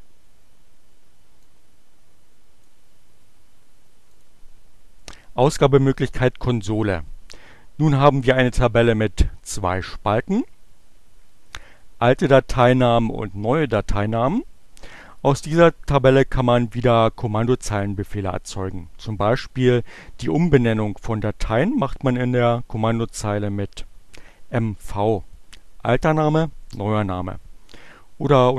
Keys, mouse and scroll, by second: 0.8-2.9 drag, 3.5 click, 4.1 click.